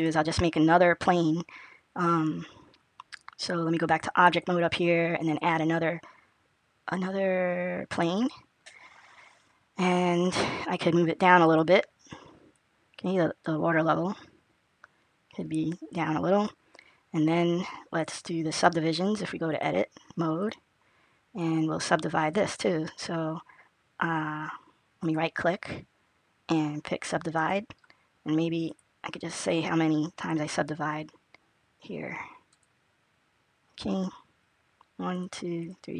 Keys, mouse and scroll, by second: 3.7 click, 5.1 click, 11.4 click, 12.6 click, 19.4 click, 28.6 click, 32.4 click, 35.0 click, 35.4-35.9 click.